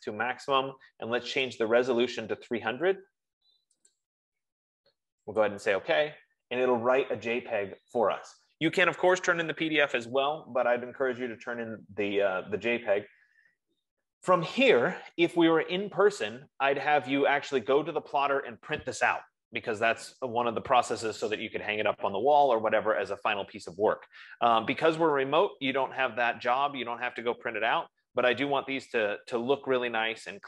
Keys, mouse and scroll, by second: 2.2 click, 4.6 click, 5.9 click, 27.9 F15.